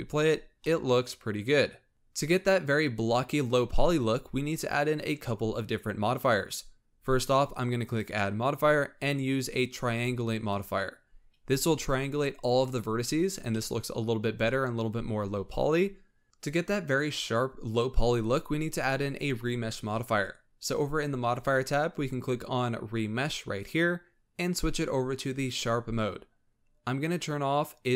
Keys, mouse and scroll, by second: 0.6-1.9 middle drag, 1.9-3.2 scroll up 1, 3.2-3.7 scroll up 1, 3.7-4.0 shift+middle drag, 4.0-7.1 scroll up 2, 7.8-10.8 drag, 11.1 scroll up 4, 13.3 scroll down 3, 13.5-17.8 middle drag, 21.4-24.5 drag, 25.4 click, 27.8 click.